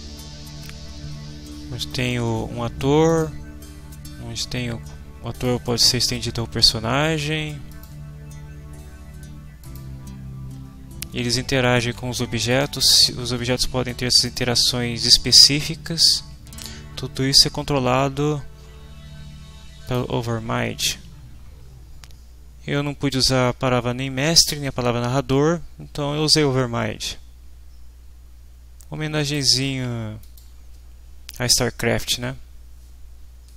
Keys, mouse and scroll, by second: 3.1 click, 5.3 click, 7.7 click, 9.6 click, 12.5 click, 19.8 click, 23.1-29.5 drag, 30.2 click.